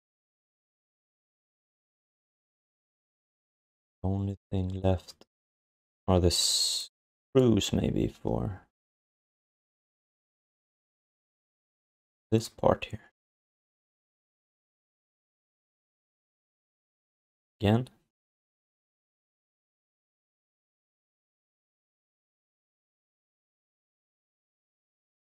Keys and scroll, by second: 1.4 ctrl+s, 13.2 ctrl+s.